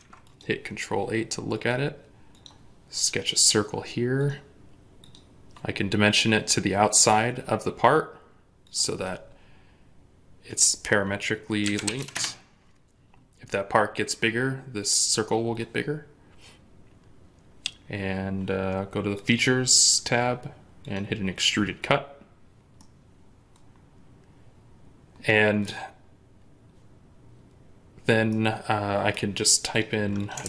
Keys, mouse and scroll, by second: 11.5 typing, 11.8 Return, 12.0 Return, 22.4 scroll up 1, 22.6 middle click, 25.8 scroll down 1, 28.1 middle click, 30.0 double click, 30.3 ctrl+a.